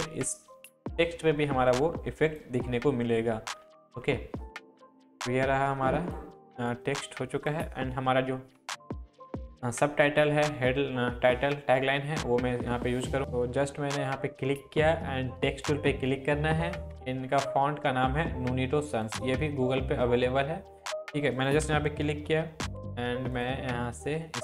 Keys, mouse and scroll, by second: 3.6 Down, 5.0 click, 6.4 Up, 7.4 click, 13.2 click, 18.9 click, 21.6 ctrl+click, 22.0 ctrl+v, 23.3-24.4 drag.